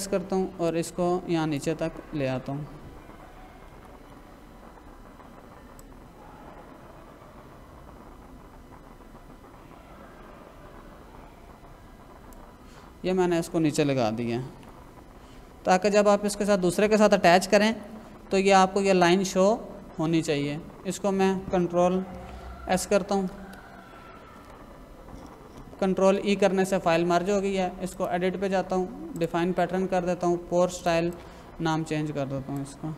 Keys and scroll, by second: 3.7 ctrl+-, 14.5 ctrl+=, 17.6 ctrl+-, 22.2 ctrl+s, 23.3 Escape, 25.9 ctrl+e.